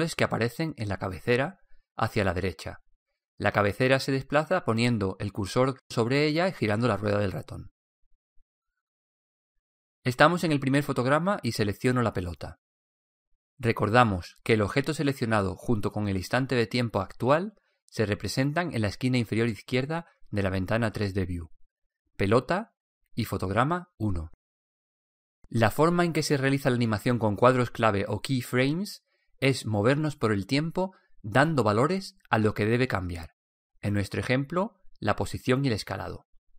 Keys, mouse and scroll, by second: 0.1-1.4 middle drag, 4.8-6.1 middle drag, 6.8-8.5 middle drag, 13.3-15.2 right drag.